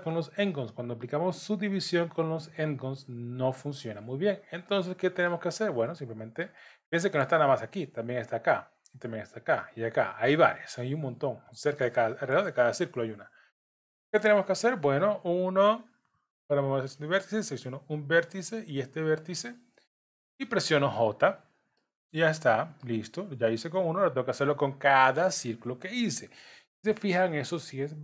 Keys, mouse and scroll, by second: 4.8-5.3 scroll down 3, 5.3 middle click, 6.6 middle click, 8.1 click, 9.1 click, 11.8 middle click, 13.0 scroll up 3, 13.4 scroll down 1, 15.2 1, 17.5 click, 18.7 shift+click, 21.7 j, 21.8 middle click, 24.3-25.2 scroll down 3.